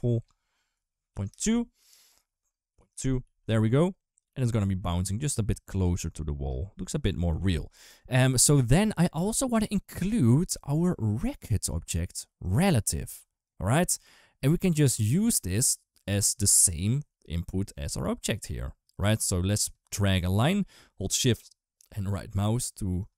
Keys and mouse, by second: 1.9 click, 3.1 ctrl+s, 4.2 click, 4.4 space, 6.2 space, 7.2 ctrl+s, 10.8 click, 12.4 click, 13.4 click, 17.1 click, 19.0 shift+right click, 19.3 shift+right click, 21.9 shift+right click, 22.1 shift+right click.